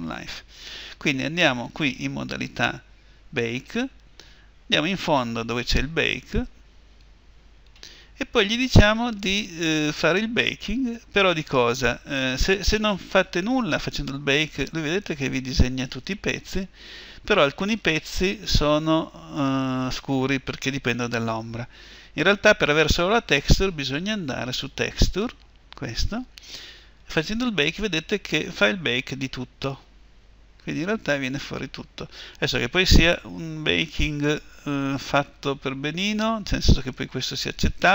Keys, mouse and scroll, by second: 13.9-24.4 drag, 27.4-37.9 drag.